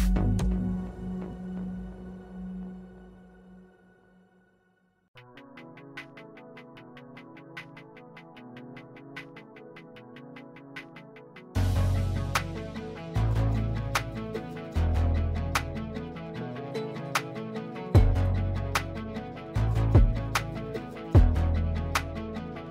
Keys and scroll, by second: 3.3 i, 5.2-5.7 typing, 5.9 Return, 8.4 Escape, 10.1 \, 11.6 i, 13.7-14.6 typing, 16.2 \, 19.9 F3, 20.4 F3.